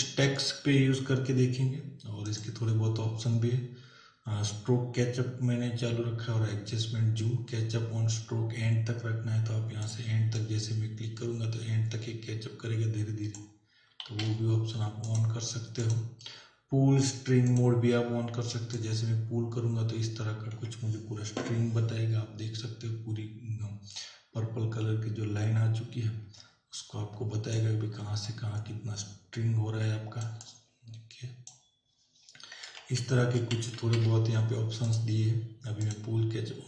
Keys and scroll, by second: 14.1 ctrl+z, 32.8 ctrl+alt+z.